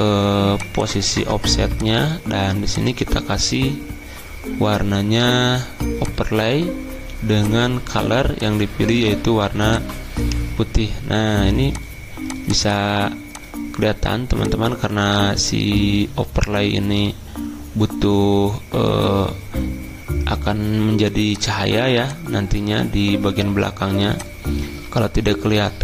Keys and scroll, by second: 1.1 0.